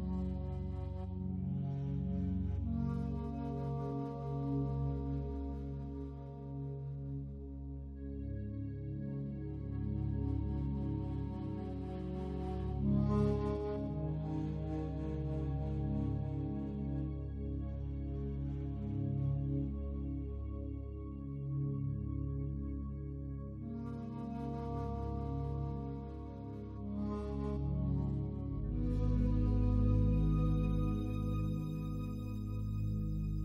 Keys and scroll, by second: 23.6 ctrl+z.